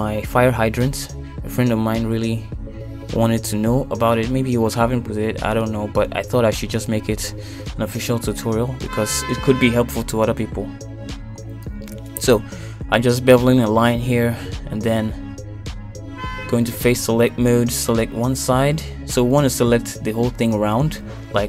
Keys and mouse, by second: 2.5 shift+middle click, 3.5 shift+middle click, 4.0 middle click, 5.2 shift+middle click, 7.4 middle click, 9.5 shift+middle click, 11.0 shift+middle click, 12.8 ctrl+r, 14.4 ctrl+b, 17.3 middle click, 18.0 shift+middle click, 19.7 click, 21.1 click.